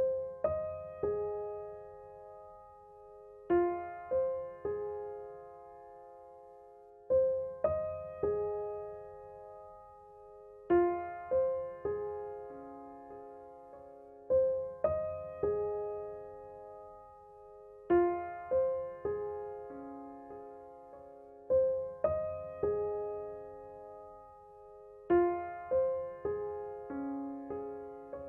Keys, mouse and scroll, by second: 5.6 ctrl+j, 7.4 click, 11.4 p, 14.0 right click, 15.4-24.1 drag, 24.1 ctrl+z, 24.8 ctrl+z, 25.3-28.2 drag.